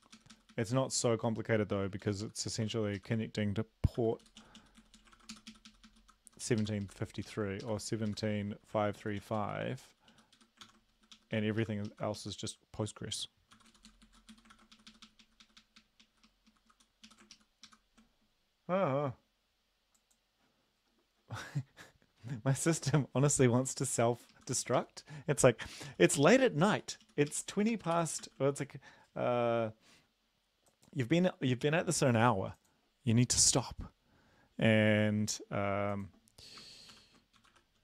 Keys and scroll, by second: 0.1 Up, 0.3 Up, 0.5 Up, 0.7 Up, 2.0 ctrl+shift+Left, 2.2 ctrl+shift+Left, 3.0 shift+Left, 4.0 ctrl+c, 4.2 Down, 4.4 Down, 4.6 Down, 4.8 Down, 4.9 Down, 5.2 ctrl+v, 5.3 Up, 5.5 Up, 5.7 Up, 5.9 Up, 6.0 Left, 6.3 Right, 6.6 ctrl+shift+Left, 6.8 ctrl+shift+Left, 7.2 ctrl+shift+Left, 8.1 shift+Left, 8.8 ctrl+c, 9.0 Down, 9.2 Down, 9.4 Down, 10.1 Down, 10.4 End, 10.6 ctrl+v, 11.0 Up, 11.1 Up, 11.3 Up, 11.6 Left, 11.8 Left, 13.6 ctrl+c, 13.7 Down, 13.9 Down, 14.0 Down, 14.3 End, 14.5 ctrl+v, 14.8 Up, 14.9 Up, 15.0 Up, 15.2 Up, 15.4 Up, 15.7 Up, 15.8 Up, 16.2 Left, 16.5 Left, 17.1 Up, 17.3 ctrl+shift+Left, 17.7 ctrl+shift+Left, 24.0 Right, 24.3 Left, 25.7 ctrl+c, 25.9 Down, 26.0 Down, 26.2 Down, 26.4 Down, 26.6 Down, 27.0 Down, 27.3 Up, 27.5 Right, 27.7 Right, 27.9 ctrl+v, 28.2 ctrl+s, 36.9 ctrl+p, 37.4-37.8 typing.